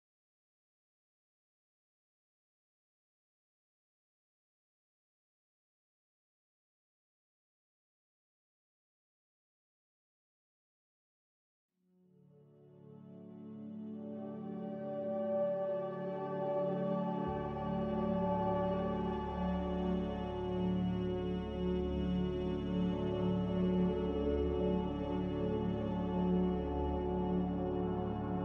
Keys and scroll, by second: 1.0 s, 5.0 a, 7.3 z, 10.3 typing, 12.5-13.2 typing, 17.7 4, 18.6 BackSpace, 18.6 BackSpace, 19.3 3, 19.9 Return, 22.7 m, 25.8 b.